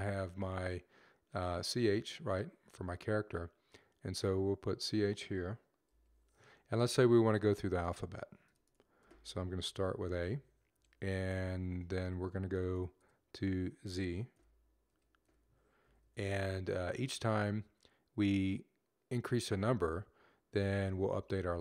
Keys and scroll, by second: 5.7-16.0 typing.